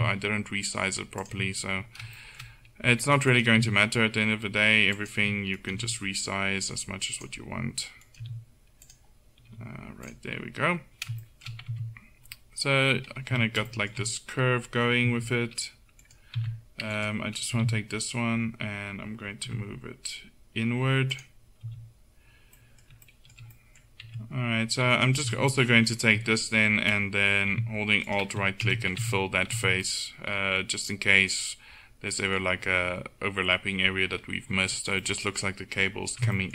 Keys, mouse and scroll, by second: 0.0 g, 0.0 click, 1.0-3.2 middle drag, 3.6-4.7 drag, 3.6 g, 4.7 right click, 5.6 right click, 5.8 g, 8.3 g, 9.6 g, 11.8 Tab, 13.4 z, 15.2 z, 16.1 right click, 16.4 Tab, 17.6 g, 21.7 z, 22.7-24.1 middle drag, 24.1 Tab, 25.0-27.3 drag, 25.3 z, 26.2 Tab, 28.8 click, 28.8 f, 29.0 Tab, 29.2 click, 29.6 z, 32.7-35.1 middle drag.